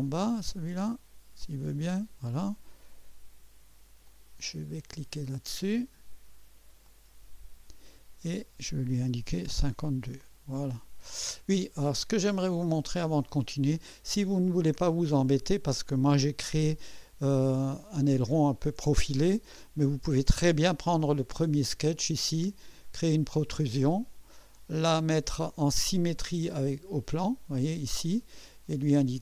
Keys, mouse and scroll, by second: 0.8-2.3 drag, 4.0 click, 6.8 click, 9.0-10.0 typing, 12.1 click, 18.4 scroll up 2, 19.3-19.8 right drag, 21.0 click, 22.8 click, 23.7-24.9 drag, 26.4 click, 27.2 scroll up 1.